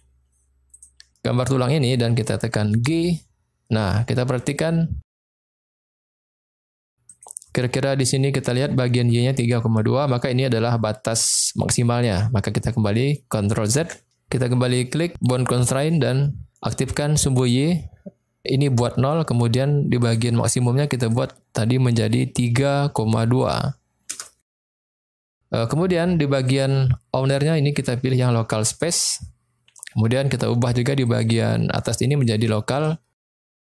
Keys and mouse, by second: 2.7 g, 7.1 click, 13.8 ctrl+z, 15.2 click, 17.3 click, 20.0 click, 21.0-24.6 drag, 26.6-28.8 drag, 31.1-33.6 drag.